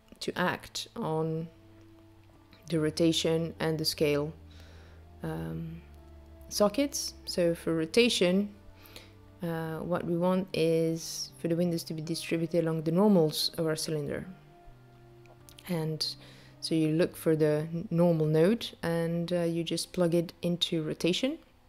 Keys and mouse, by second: 1.3 click, 3.6 click, 7.2 click, 20.0 click.